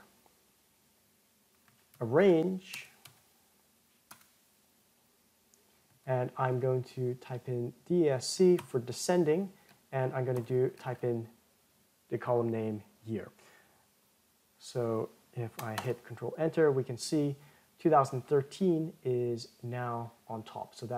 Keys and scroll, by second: 16.2 ctrl+Return.